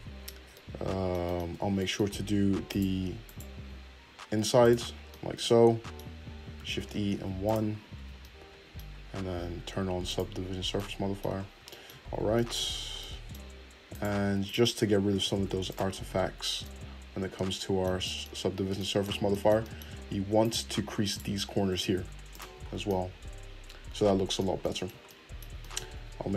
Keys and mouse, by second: 1.6 Tab, 2.7 alt+click, 2.8 alt+middle click, 3.2 alt+click, 3.3-4.6 alt+middle drag, 4.6 click, 5.1-10.1 middle drag, 6.7 shift+e, 7.9 Tab, 10.1 click, 10.5-13.9 middle drag, 12.1 Tab, 13.9 click, 14.0 shift+middle click, 14.4 shift+click, 14.8-20.4 shift+middle drag, 15.2 shift+e, 16.0 Tab, 18.6 Tab, 20.4 click, 20.5 shift+middle click, 21.1 shift+click, 21.7 shift+e, 22.4 Tab, 25.6-26.3 shift+middle drag, 25.9 Tab.